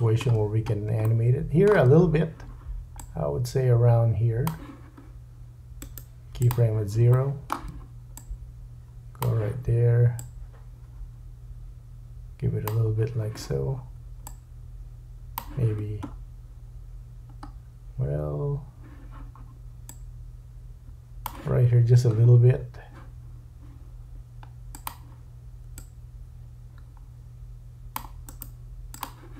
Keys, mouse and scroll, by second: 3.0 click, 5.8 right click, 7.1 shift+middle click, 8.2 click, 10.2 click, 14.3 click, 16.0-17.3 scroll down 4, 19.9 click, 22.3-22.9 scroll up 4, 24.9 click, 28.7-29.3 right drag.